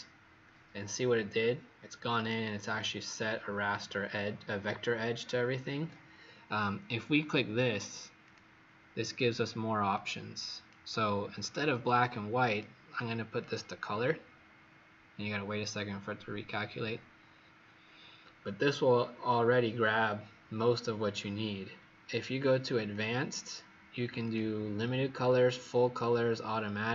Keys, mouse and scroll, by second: 2.9-3.5 alt+scroll up 3, 4.1-4.5 alt+scroll down 1, 8.2 click, 11.3-12.2 scroll up 3, 12.5 click.